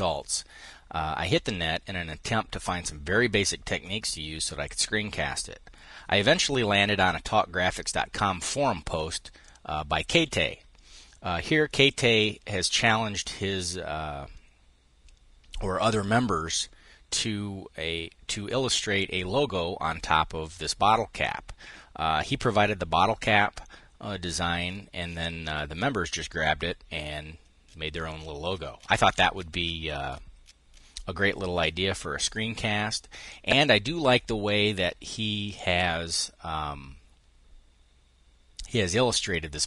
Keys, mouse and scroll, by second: 33.0-35.9 drag.